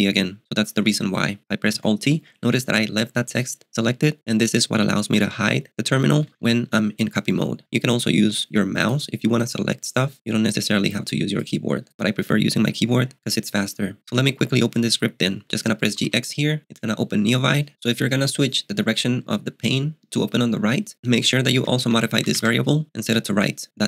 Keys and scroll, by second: 1.8 alt+t, 5.4 †, 5.9 †, 6.2 †, 14.1 j, 15.6-16.5 typing, 21.3-22.9 typing.